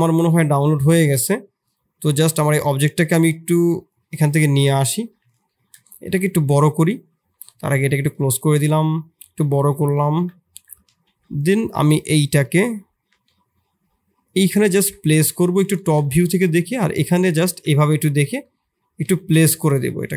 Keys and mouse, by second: 2.6 middle click, 3.8-5.0 drag, 5.0 middle click, 5.5 shift+middle click, 5.8 s, 8.4 middle click, 9.1 s, 10.1 KP_7, 10.8 shift+z, 11.5 g, 13.0 g, 14.7 KP_3, 15.8 g, 17.6 KP_3, 18.2 KP_1, 19.0 shift+z, 19.5 click.